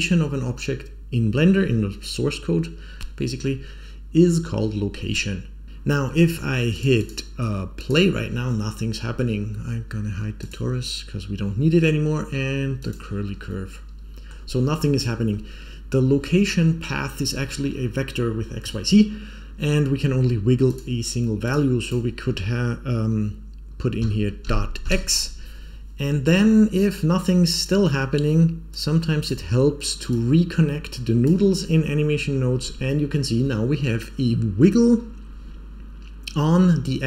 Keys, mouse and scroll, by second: 6.7 click, 6.9 click, 7.7 click, 10.3 click, 12.7 click, 13.4 middle click, 15.3-15.9 scroll up 2, 20.6-25.6 drag, 26.2-26.6 scroll down 4, 26.6-27.2 scroll up 3, 27.2 click, 28.6-29.2 drag, 30.0-31.2 drag.